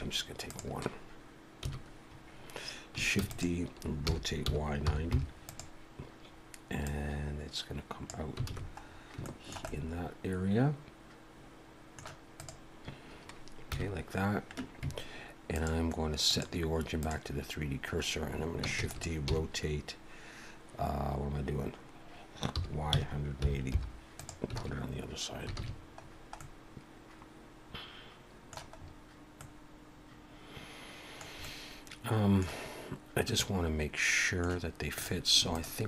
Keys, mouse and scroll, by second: 0.5 click, 1.6 KP_1, 3.2 shift+d, 4.1 r, 6.8 click, 8.5 alt+a, 8.9 scroll up 1, 9.2 shift+middle click, 9.7 middle click, 12.4 click, 13.7 KP_1, 15.5 click, 18.8 shift+d, 19.3 r, 25.6 alt+a, 26.0-26.4 scroll down 2, 26.4 middle click, 28.8-29.1 scroll up 3, 29.4 middle click, 31.4 middle click, 33.2 middle click, 35.0 click, 35.5 shift+click.